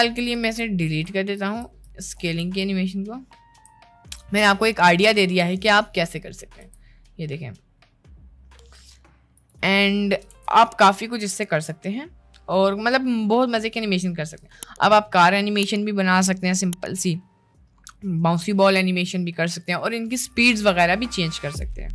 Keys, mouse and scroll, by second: 0.1 click, 0.5 ctrl+z, 0.9 ctrl+z, 1.4 ctrl+z, 1.9 ctrl+z, 2.3 ctrl+z, 2.7 ctrl+z, 3.2-3.6 ctrl+z, 4.6 middle click, 5.7 middle click, 6.7 space, 9.4 drag, 10.3 ctrl+s, 12.9 middle click.